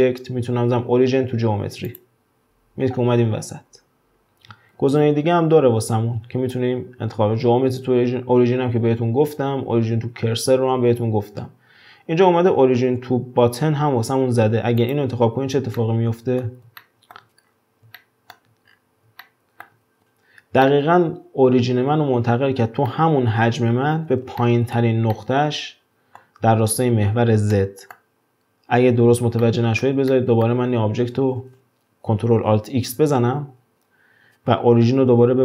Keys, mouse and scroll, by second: 4.8 ctrl+alt+x, 15.8-17.5 middle drag, 17.5-18.0 scroll up 1, 18.0-18.7 shift+middle drag, 18.7-19.2 scroll up 6, 19.2-23.7 shift+middle drag, 24.4-28.4 shift+middle drag, 28.4-28.9 scroll down 2, 28.9-29.4 scroll up 1, 29.4-32.9 middle drag, 32.9 ctrl+alt+x.